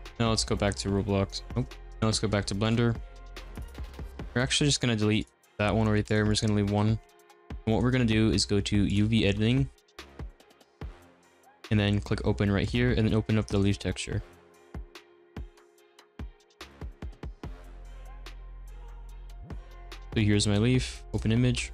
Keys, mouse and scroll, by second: 2.4 scroll up 1, 2.6 click, 3.3-4.2 drag, 4.2 middle click, 4.8 x, 6.0 click, 6.6-7.9 middle drag, 7.9-8.9 scroll up 1, 8.9 click, 9.5 middle click, 10.3-10.9 scroll up 4, 10.9-12.7 shift+middle drag, 12.7-21.2 drag.